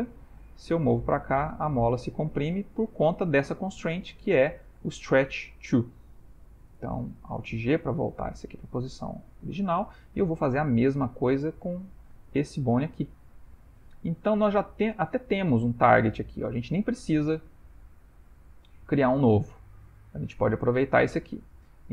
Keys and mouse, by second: 0.3 g, 3.6 click, 4.4 click, 5.5 click, 7.1 alt+g, 7.9 shift+middle click, 8.4 middle click, 9.7 shift+middle click, 10.3 ctrl+middle click, 11.6 shift+middle click, 11.9 shift+middle click, 12.2 ctrl+middle click, 13.0 click, 13.9 shift+middle click, 14.0 shift+middle click, 14.2 shift+middle click, 14.6 middle click, 14.7 middle click, 14.9 middle click, 15.2 shift+middle click, 18.4 shift+middle click, 18.7 shift+middle click, 19.0 ctrl+middle click, 19.8 click, 21.8 click.